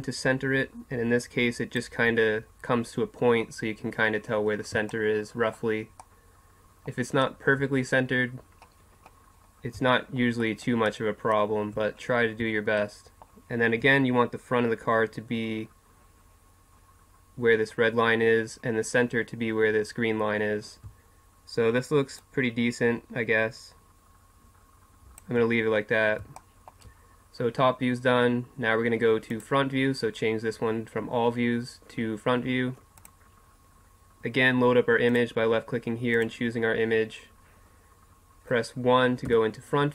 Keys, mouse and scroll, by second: 4.3 middle click, 5.5-6.5 middle drag, 6.8 middle click, 8.4 middle click, 9.7 middle click, 10.7 middle click, 11.3 middle click, 22.2-25.6 drag, 25.7 middle click, 29.3-35.1 drag, 36.7-39.2 drag, 39.2 KP_1.